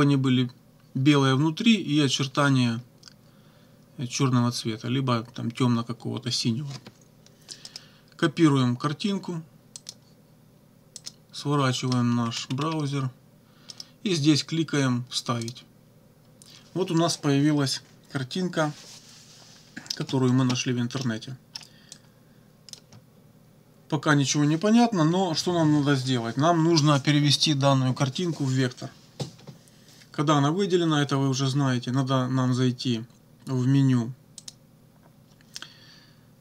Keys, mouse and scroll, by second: 7.7 right click, 9.8 click, 11.0 click, 12.3-12.8 scroll up 1, 13.7 right click, 15.4 click, 21.0 click, 22.0 click, 34.4 click.